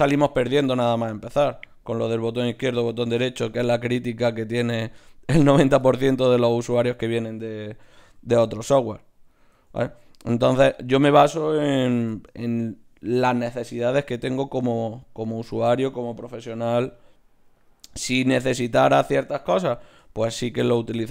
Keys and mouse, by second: 0.0 g, 0.9 g, 1.8 g, 2.7 g, 3.9 g, 4.8 g, 6.1 click, 6.3-9.3 middle drag, 7.7 ctrl+r, 9.7 ctrl+z, 10.1 ctrl+Tab, 10.9 right click, 11.7 f, 13.9 ctrl+r, 16.7 s, 18.2 s.